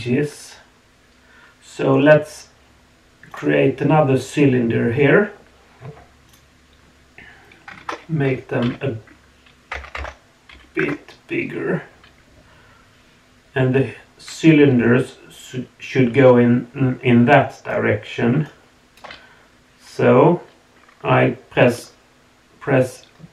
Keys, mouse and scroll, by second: 6.3-10.8 drag, 9.9 BackSpace, 15.2 d, 15.3-17.7 drag, 17.7-18.4 d, 18.4 right click, 19.0 d.